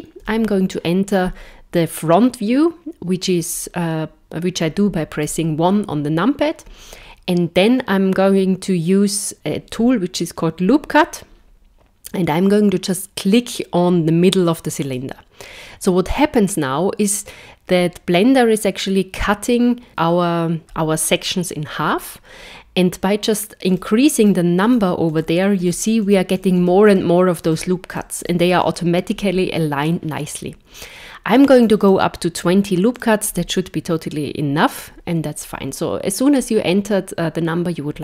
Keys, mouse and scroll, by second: 0.2 KP_1, 10.9 click, 14.8 click, 23.7 click, 24.2 click, 24.6 click, 25.1 click, 25.6 click, 26.0 click, 26.4 click, 26.6 click, 26.8 click, 27.4 click, 27.9-31.8 click, 28.3 click, 28.4 click, 31.6 click, 31.6 click, 32.3 click, 33.0 click.